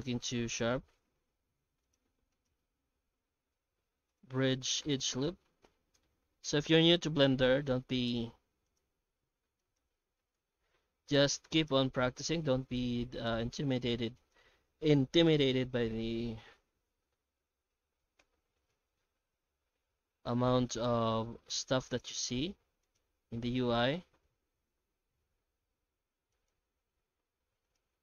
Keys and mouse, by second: 0.2 x, 1.0 2, 2.3 alt+shift+right click, 2.9 ctrl+e, 4.8 alt+a, 5.5 shift+middle click, 6.2 middle click, 7.1 shift+middle click, 8.0 2, 8.7-9.8 alt+shift+right drag, 10.3 ctrl+x, 10.9 ctrl+r, 13.9 3, 14.2 alt+shift+right click, 15.5 i, 18.7 Tab, 19.3-21.0 middle drag, 21.2 shift+middle click, 21.9 right click, 22.0 Tab, 22.6 Tab, 22.8 right click, 23.0 Tab, 23.8 middle click, 24.5 shift+middle click, 24.9 2, 25.3 a, 26.0 alt+a, 26.3 alt+shift+right click, 27.0 s.